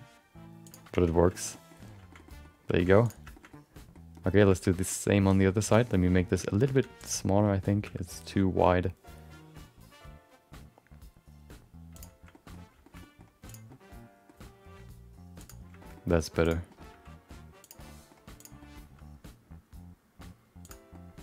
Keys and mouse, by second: 1.1 Tab, 1.3 shift+middle click, 1.5 middle click, 2.1 shift+middle click, 2.3 middle click, 3.0 click, 3.3 shift+middle click, 4.1 middle click, 4.7 middle click, 5.1 shift+middle click, 5.3 middle click, 5.6 Tab, 5.8 middle click, 6.3 shift+middle click, 6.4 middle click, 6.7 3, 7.0 click, 7.2 middle click, 7.8 g, 12.3 middle click, 12.8 shift+middle click, 13.0 middle click, 13.4 click, 13.6 middle click, 14.3 g, 15.8 middle click, 15.9 middle click, 16.4 click, 16.7 middle click, 16.9 g, 17.8 middle click, 18.4 click, 18.6 middle click, 18.8 g, 20.9 middle click.